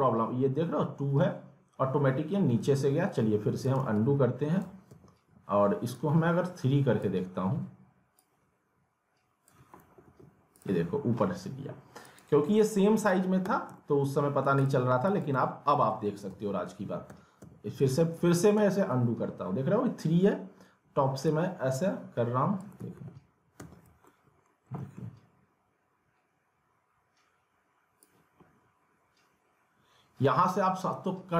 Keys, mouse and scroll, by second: 2.6 w, 3.8 alt+w, 4.9 ctrl+z, 5.9-9.7 drag, 9.7 alt+w, 10.5 click, 13.4 w, 13.8 alt+middle click, 14.6 click, 15.9 alt+w, 16.7 ctrl+z, 18.2 ctrl+z, 21.3-22.8 drag, 22.8 alt+w, 23.6 ctrl+z, 24.0 alt+middle click, 24.4 scroll down 1, 24.8 alt+middle click, 28.0-31.3 drag.